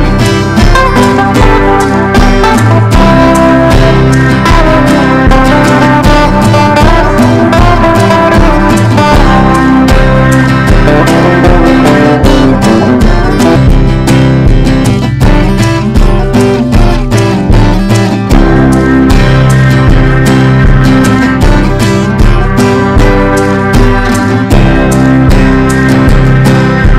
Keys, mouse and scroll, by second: 0.0-13.2 typing, 3.8 Return, 9.4 Return, 13.6 right click, 14.0 click, 15.0-21.6 typing, 16.7 Return, 23.3-26.1 typing.